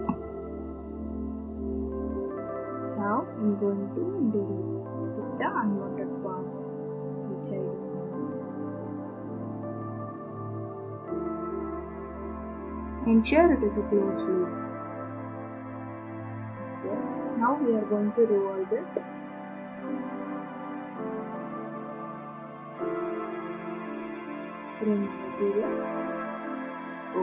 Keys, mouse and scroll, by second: 0.1 Escape, 2.5 click, 6.5 click, 10.5 click, 11.9 scroll up 2, 12.2-13.1 scroll down 3, 13.1 scroll up 1, 14.8 click, 15.3-15.6 scroll, 19.3 click, 22.7 click, 24.9 click.